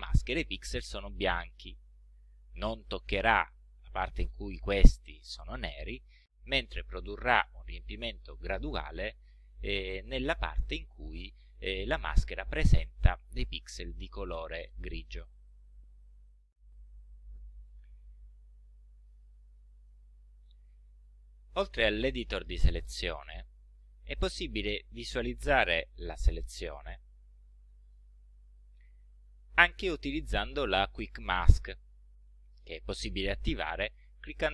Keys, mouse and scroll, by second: 6.6 ctrl+scroll up 2, 7.3-8.0 ctrl+scroll up 4, 8.4-9.0 ctrl+scroll down 4, 9.5 ctrl+scroll up 2, 19.8-21.3 drag, 23.7-24.0 scroll down 1, 24.3-25.0 ctrl+scroll down 4, 25.8 ctrl+z, 27.6 click, 28.3 ctrl+z, 29.1 ctrl+scroll up 2.